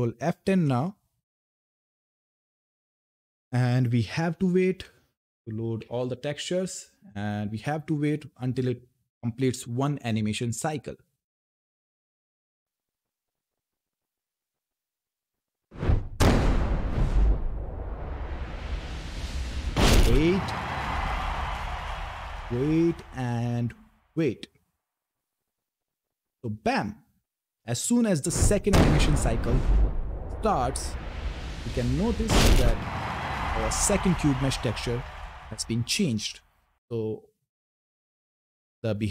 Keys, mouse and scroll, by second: 0.2 ctrl+F10, 4.4-6.6 typing, 31.0-32.6 typing.